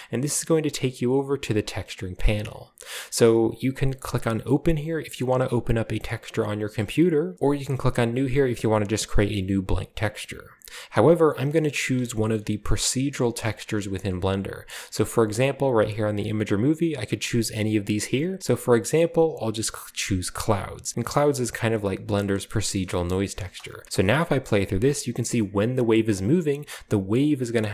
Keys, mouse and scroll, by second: 12.3 shift+middle click, 12.6-16.1 scroll up 1, 12.8-16.1 middle drag, 16.1 click, 18.4 click, 20.4-21.2 drag, 22.7 shift+middle click, 23.0 shift+middle click, 23.0-23.8 shift+scroll up 1, 23.3 middle click, 23.4 space, 23.8-24.7 scroll down 1, 24.7 space, 24.9-26.0 drag, 26.4-27.7 scroll up 1, 26.6-27.7 middle drag.